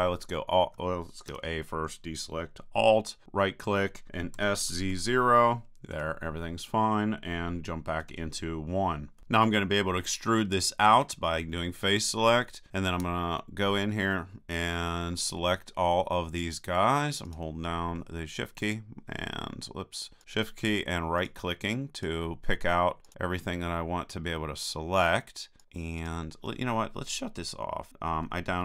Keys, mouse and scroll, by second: 1.3 a, 3.2-4.6 right drag, 4.4 s, 8.0 KP_1, 11.1-12.7 drag, 12.8-14.7 right drag, 17.3-24.4 right drag, 25.6-27.7 right drag, 27.9 click.